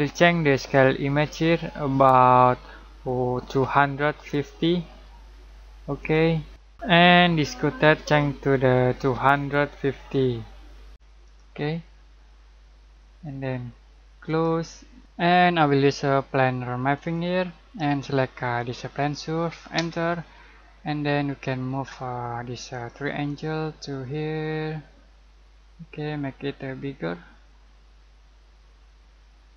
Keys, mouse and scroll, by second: 4.5-5.4 typing, 6.0 click, 9.5-11.1 typing, 11.2 click, 14.2 click, 17.0 click, 19.8 space, 20.4 scroll down 1, 20.6-22.8 middle drag, 22.8 click.